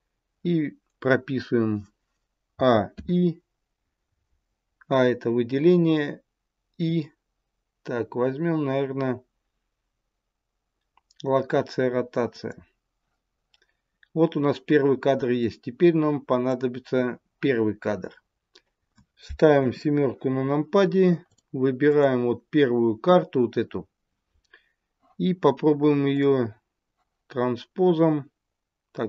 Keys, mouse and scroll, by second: 2.4 a, 2.8 i, 15.3 click, 19.5 KP_7, 21.2 click, 21.8 click, 26.1 click.